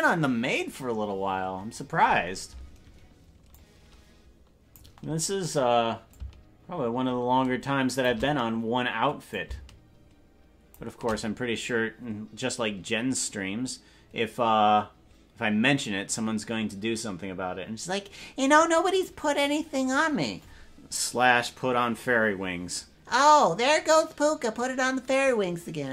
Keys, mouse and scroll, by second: 3.5-4.8 drag, 6.1-8.1 drag, 9.2-10.7 drag.